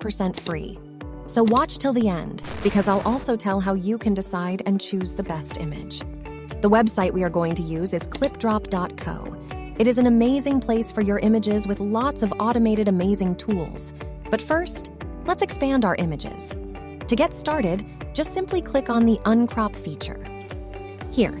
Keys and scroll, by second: 6.4 a, 8.7-9.1 scroll, 9.3 scroll down 1, 9.4-10.2 scroll, 11.2 scroll down 1, 11.4 scroll.